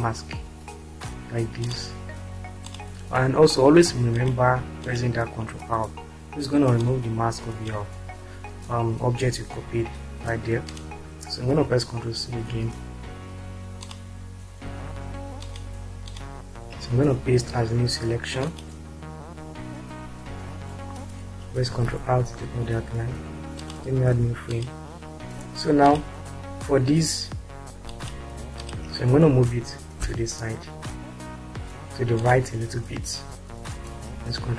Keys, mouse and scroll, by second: 1.6 click, 4.1 ctrl+click, 5.3 ctrl+click, 6.9-8.2 shift+drag, 10.9 click, 12.3 ctrl+c, 21.7 ctrl+r, 24.1 5, 28.0 ctrl+click, 30.0 Right, 34.2 ctrl+c.